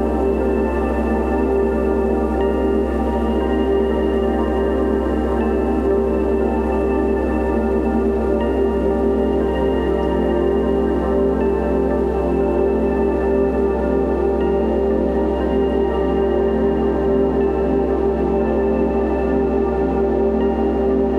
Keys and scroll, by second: 0.3 [, 0.9 5, 1.6 [, 2.6 [, 4.6-7.3 typing, 8.7 ], 9.8 x, 10.3 [, 11.7-12.7 typing, 13.2 alt+super+z, 13.7 alt+super+e, 13.9 ], 15.3 super+z, 15.6 super+2, 15.9 ], 16.2 [, 18.4-21.1 typing.